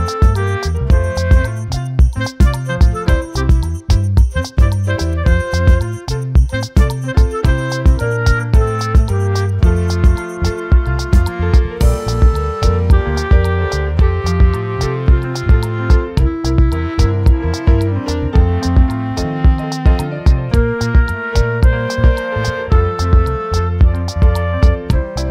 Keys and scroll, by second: 19.2 ctrl+t.